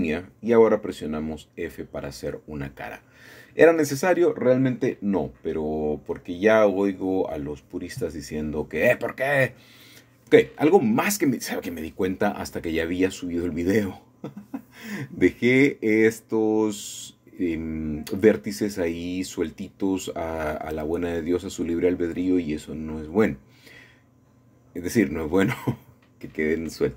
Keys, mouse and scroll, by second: 0.3 f, 1.0 click, 3.3 click, 3.7 scroll down 1, 7.6 middle click, 8.0 middle click, 8.4 middle click, 8.6 middle click, 8.8-10.7 middle drag, 11.0 shift+middle click, 11.2 shift+middle click, 11.9 shift+middle click, 12.3-13.0 scroll up 2, 12.6 middle click, 12.8 middle click, 12.9 middle click, 13.2-17.6 shift+middle drag, 18.9 typing, 20.2 click, 20.2 typing, 21.8 typing, 22.4 click, 22.8 middle click, 23.3-23.9 scroll down 1, 23.4-23.9 typing, 24.1 shift+middle click, 24.8-25.8 scroll up 1, 25.3 shift+middle click, 25.8 typing, 25.9 scroll down 1, 26.5-26.9 scroll up 1.